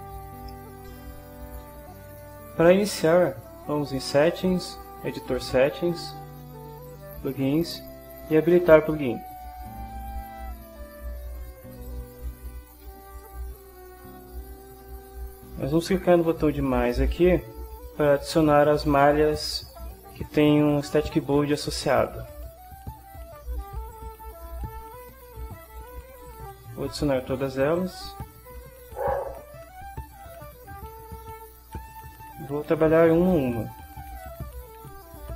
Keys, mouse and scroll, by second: 0.6 ctrl+shift+middle click, 4.0 click, 5.5-6.5 drag, 6.9 click, 9.5 click, 11.9 click, 22.3 click, 23.9 click, 26.3 click, 27.6 click, 28.9 click, 29.9 click, 31.9 click, 34.4 click.